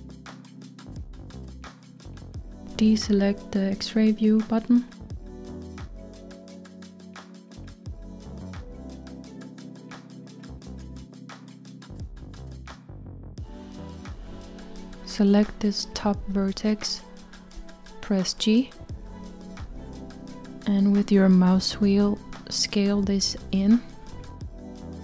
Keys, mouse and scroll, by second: 5.6-6.9 drag, 6.9-7.5 scroll down 4, 8.3-12.4 middle drag, 12.4-13.2 scroll up 1, 13.2-14.3 middle drag, 14.3-16.9 scroll up 2, 16.9 click, 17.8-20.1 middle drag, 20.1 g.